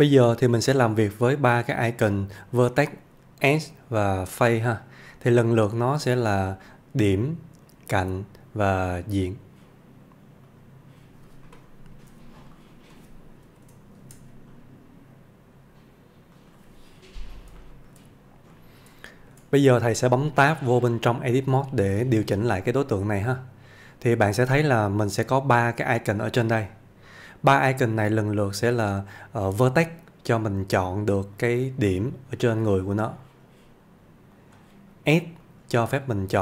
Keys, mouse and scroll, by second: 0.2-14.0 click, 14.0 shift+a, 16.4 click, 17.3 scroll up 1, 17.6 shift+middle click, 18.1-18.5 scroll up 1, 18.5 middle click, 19.1 shift+middle click, 21.5 Tab, 22.5-23.1 middle click, 31.4 click.